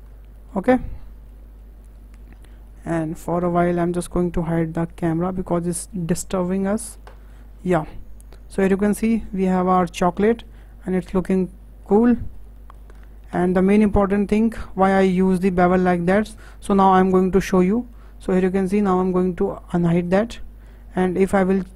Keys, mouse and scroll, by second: 0.4 middle click, 0.7-1.0 scroll up 4, 1.0-2.3 shift+middle drag, 2.3-2.7 scroll down 4, 2.7-3.4 shift+middle drag, 3.4-3.9 scroll down 3, 3.9 click, 5.3 h, 5.7-6.2 scroll up 5, 6.2-7.4 shift+middle drag, 7.4-7.9 scroll up 5, 7.9-9.3 middle drag, 9.3-9.7 scroll down 5, 9.7-12.9 middle drag, 12.9-13.4 scroll up 4, 13.4-20.0 shift+middle drag, 20.0 click, 20.6-21.3 scroll up 5, 21.3 click.